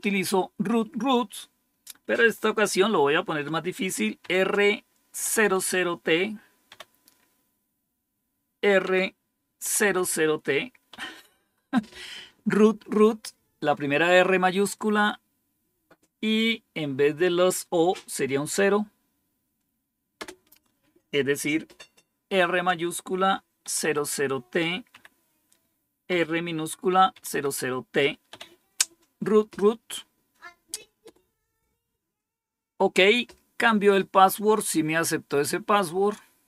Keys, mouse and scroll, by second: 4.1-6.6 typing, 8.7-9.7 typing, 10.8 typing, 20.1 Return, 22.2 typing, 23.5 typing, 24.8 typing, 26.0 typing, 27.0-28.2 typing, 35.4-36.4 scroll down 11.